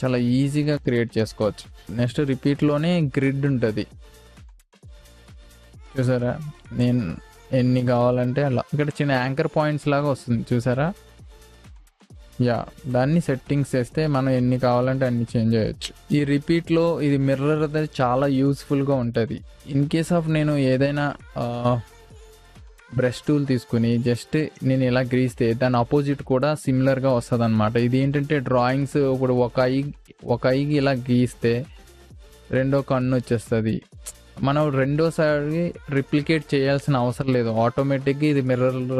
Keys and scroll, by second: 1.8 ctrl+z.